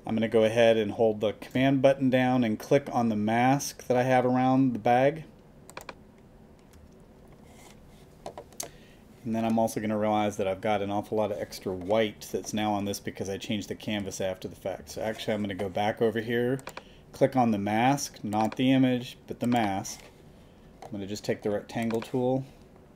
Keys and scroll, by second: 14.8 super+d.